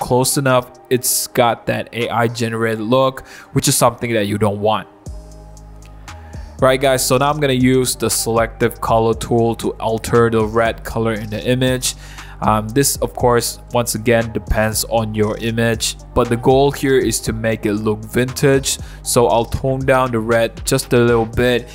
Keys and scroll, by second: 0.1 BackSpace, 20.7 0.